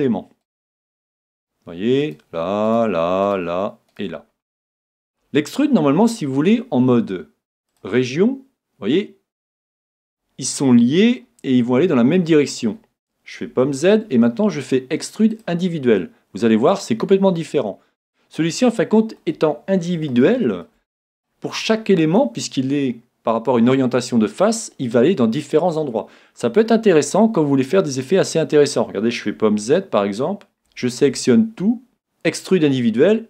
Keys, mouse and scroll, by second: 0.0-5.6 right drag, 4.5-6.3 middle drag, 7.7-9.5 drag, 10.4-12.2 middle drag, 13.7 super+z, 15.3-17.3 drag, 18.5-22.8 middle drag, 28.4-29.3 scroll down 1, 29.3-30.1 scroll down 1, 29.5 super+z, 30.1 scroll down 1, 30.9 a, 31.0 a, 31.9-33.1 drag.